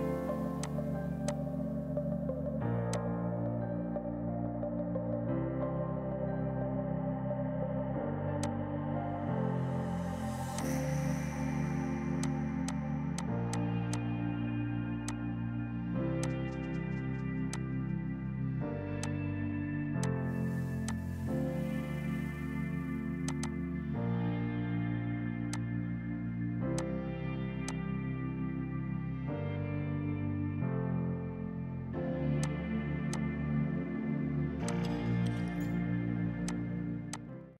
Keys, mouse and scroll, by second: 0.4 space, 0.7 click, 2.2 right click, 2.8 F2, 3.1 click, 4.0 F8, 4.5 Page_Up, 5.3-7.5 typing, 8.5 click, 9.9 shift+F4, 10.5 F2, 10.7 click, 12.3 click, 12.5 c, 12.7 shift+click, 13.3 shift+click, 13.6 shift+click, 14.0 shift+click, 15.1 click, 16.3 click, 17.5 F2, 17.6 click, 20.9 ctrl+click, 23.3 click, 23.7 KP_7, 23.8 KP_0, 24.0 KP_Enter, 24.5 space, 25.6 click, 26.7 Escape, 26.8 click, 32.5 click, 33.2 click, 33.6 F2, 34.8 click, 36.8 right click, 37.2 click.